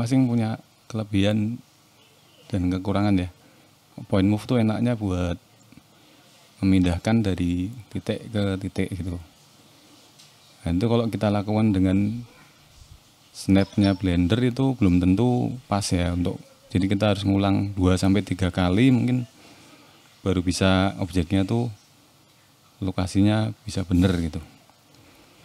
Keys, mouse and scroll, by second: 1.3 scroll down 1, 1.5 middle click, 4.0 shift+middle click, 5.1 click, 9.1 middle click, 9.5 click, 10.2 click, 10.5 middle click, 11.9 click, 14.7 click, 15.0-16.0 scroll down 3, 16.0 click, 16.0 scroll down 2, 18.4 click, 19.2 click, 20.4 click, 21.1 middle click, 21.7 click, 22.6 click, 23.3 click, 23.6 shift+middle click, 24.0 click.